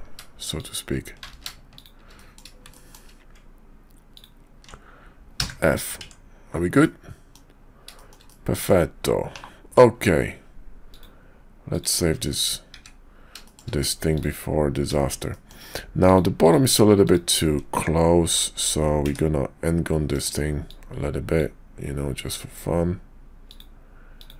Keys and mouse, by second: 0.5 shift+click, 1.4 ctrl+z, 1.7 shift+click, 2.1 click, 2.7 shift+click, 4.1 ctrl+click, 5.4 f, 6.0 Tab, 6.8 click, 7.9 shift+click, 8.2 click, 9.3 /, 10.9-12.2 drag, 12.7 `, 13.4 shift+click, 14.1 click, 15.3 shift+click, 16.0 click, 16.4 click, 17.0 click, 19.0 d, 20.7 click.